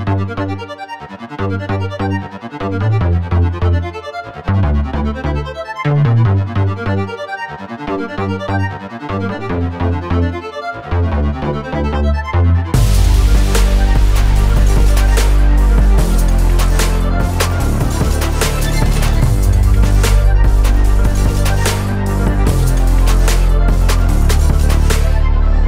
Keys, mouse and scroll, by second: 0.3 click, 2.0 click, 3.3 l, 4.6 click, 5.2 click, 5.9 Tab, 6.5-9.0 middle drag, 9.2 scroll down 1, 10.0 scroll up 2, 10.5-11.2 middle drag, 11.2-11.8 scroll down 3, 11.6 middle click, 12.5 scroll down 1, 12.8-14.1 middle drag, 15.9 click, 17.9 click, 18.7 click, 19.8-22.0 drag, 24.4 click.